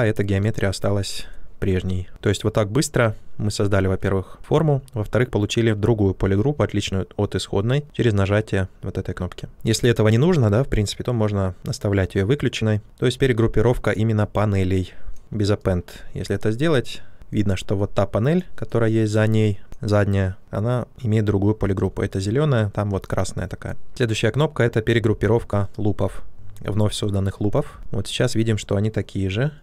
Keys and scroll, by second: 9.5 q.